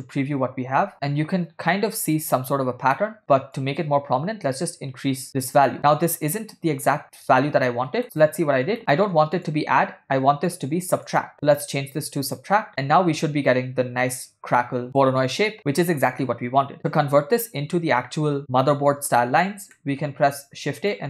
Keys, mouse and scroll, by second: 2.9 middle click, 3.8 click, 8.0 shift+middle click, 8.9 middle click, 9.6-10.2 drag, 10.5-10.9 drag, 11.0-12.7 drag, 12.9-13.9 middle drag, 19.8 middle click, 20.7 shift+a.